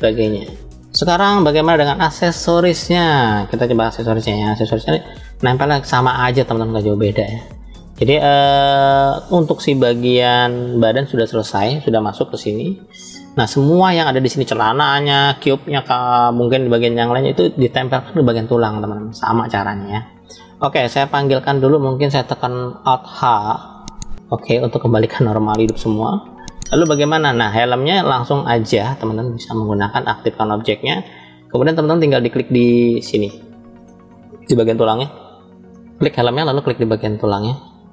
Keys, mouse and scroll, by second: 0.4-0.8 middle drag, 5.8-6.3 scroll up 2, 6.5-7.4 shift+middle drag, 8.4 click, 10.4 click, 20.6 click, 23.9 alt+h, 24.9 click, 26.1 click, 27.2-28.0 middle drag, 28.4 scroll up 2, 29.3 click, 30.1 click, 30.9 middle click, 31.6 scroll up 2, 32.9-33.8 shift+middle drag, 35.0 click, 35.6 click, 37.1 shift+click.